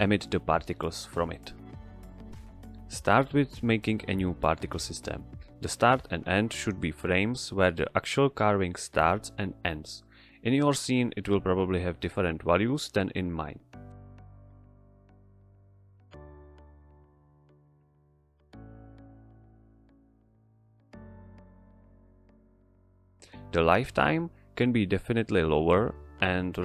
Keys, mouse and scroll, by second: 3.4 click, 8.0 click, 8.8 Right, 9.6 Left, 11.3 Right, 12.6 click, 14.1 Right, 16.0 Left, 17.3 Right, 18.7 click, 19.5 Return, 20.9 click, 23.8 click, 25.4 Return, 26.3-26.6 drag.